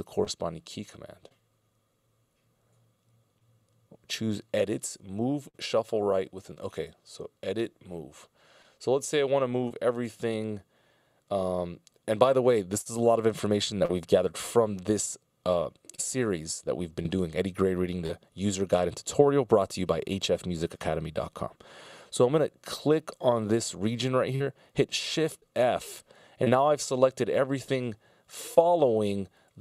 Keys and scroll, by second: 25.4 shift+f.